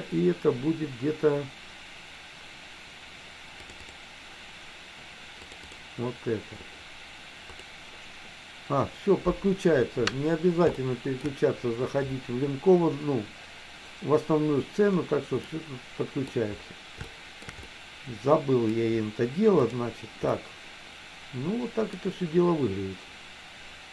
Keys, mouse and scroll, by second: 11.0 shift+middle click, 15.4-16.5 middle drag, 17.2 shift+middle click, 17.7-18.9 middle drag, 20.5-22.1 middle drag.